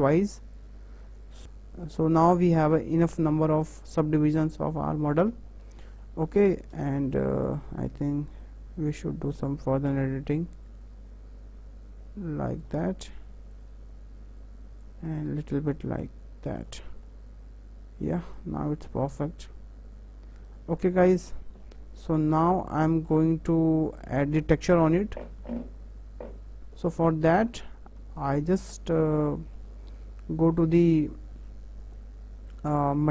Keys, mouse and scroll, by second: 1.4 middle click, 1.6-2.2 scroll up 2, 2.2-2.5 scroll down 3, 2.5-5.1 middle drag, 5.1-5.5 scroll up 3, 5.5-6.8 shift+middle drag, 6.8 alt+click, 7.2-8.4 middle drag, 8.4 click, 13.5 alt+click, 14.8 click, 16.9 scroll down 2, 17.0-18.3 middle drag, 18.3 click, 18.6 Tab, 18.9-21.1 middle drag, 21.1 scroll up 2, 21.3 scroll down 2, 21.6-22.3 middle drag, 22.3 Tab, 22.6 middle click, 23.2 Tab, 23.6-24.7 middle drag, 24.7 Tab, 25.2 Tab, 25.5 `, 26.6 `, 26.7-33.1 shift+middle drag.